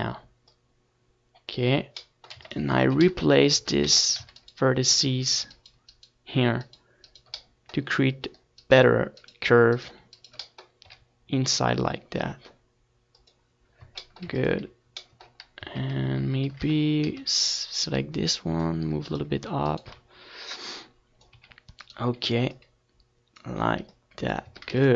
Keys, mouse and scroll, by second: 0.4 z, 2.2 t, 2.8-6.0 drag, 3.7 z, 6.3 Tab, 7.4 Tab, 8.2-12.2 middle drag, 12.2 e, 12.5-14.2 right drag, 12.7 s, 13.6 click, 13.6-15.3 middle drag, 14.3 w, 16.7 middle click, 18.5-20.1 drag, 19.7 Tab, 20.3 ctrl+s, 20.8 Tab, 21.5 a, 21.8 a, 21.9 a, 22.1-24.9 right drag.